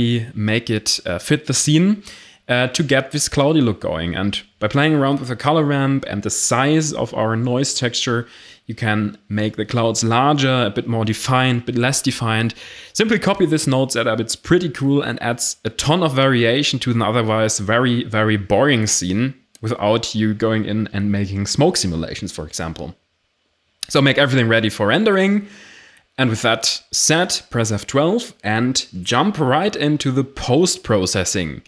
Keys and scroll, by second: 12.7 ctrl+z, 25.8 F12.